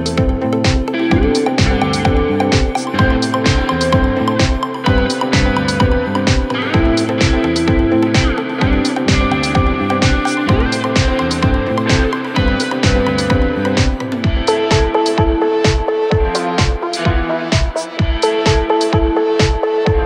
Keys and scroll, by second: 13.7 Escape.